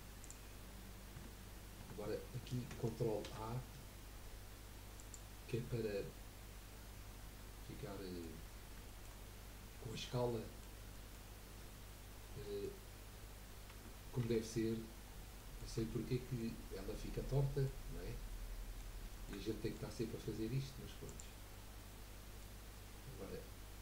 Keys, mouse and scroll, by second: 0.2 click, 0.6-1.0 scroll up 2, 1.2 Tab, 1.8 Tab, 3.2 ctrl+a, 5.7-8.4 middle drag, 8.4 scroll up 1, 8.9-11.9 shift+middle drag, 11.9 scroll up 1, 12.4-13.7 middle drag, 13.7 Tab, 14.2 Tab, 14.8 scroll up 1, 15.0 scroll down 1, 15.4 middle click, 15.8 Tab, 16.2 middle click, 16.6 scroll up 1, 16.9-21.0 middle drag, 21.0 click, 21.8-23.8 middle drag.